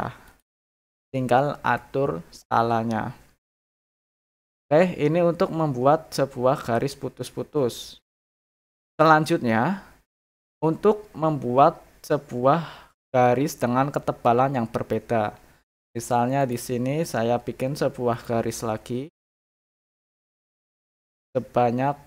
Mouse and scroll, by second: 0.2 click, 8.0 click, 9.0-10.2 middle drag, 14.9 middle click, 15.8 scroll up 2, 16.4 click, 18.1 click, 19.4 click, 20.8 click.